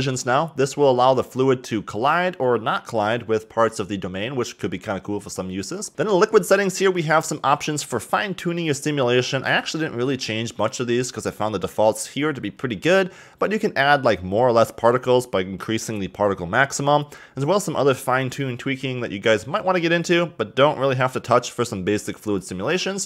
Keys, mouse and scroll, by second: 5.6-5.9 scroll down 1.